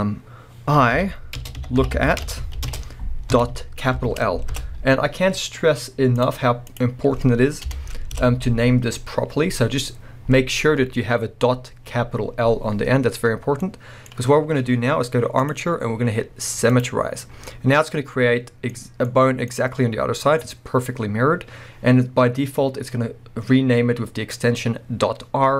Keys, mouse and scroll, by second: 1.9 o, 4.6 Return, 8.2 Return, 13.6-15.4 middle drag, 15.4-17.4 drag, 17.4-25.5 middle drag.